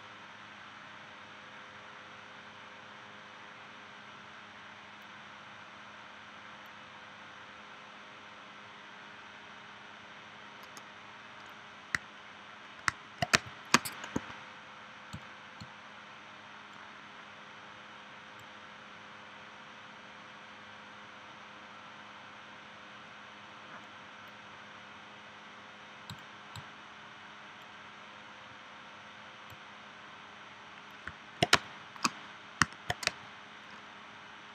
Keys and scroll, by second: 13.3 space, 14.2 a, 31.5 space, 33.0 space.